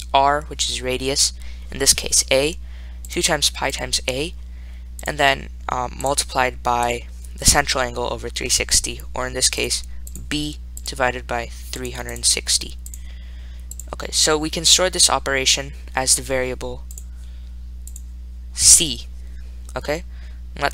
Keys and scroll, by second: 0.0-0.2 typing, 5.3 ), 7.1 (, 11.9-14.0 typing.